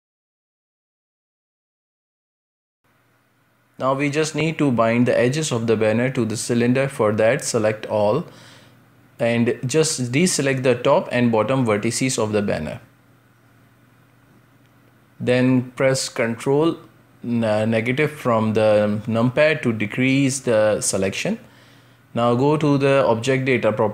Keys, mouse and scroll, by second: 0.8 middle click, 1.5 scroll up 2, 1.7 shift+middle click, 2.4-3.2 scroll up 1, 3.2-6.2 middle drag, 7.0 space, 7.4 Tab, 10.4 click, 11.3 alt+shift+right click, 11.6 scroll down 4, 12.0-13.0 scroll up 5, 13.0-13.8 scroll down 2, 13.8 click, 14.5 alt+shift+right click, 14.9 scroll down 2, 15.1-16.1 shift+middle drag, 16.1 alt+shift+right click, 16.5-17.8 shift+middle drag, 17.8 scroll up 1, 19.6 ctrl+KP_Subtract, 20.0 ctrl+KP_Subtract, 21.8-23.9 drag.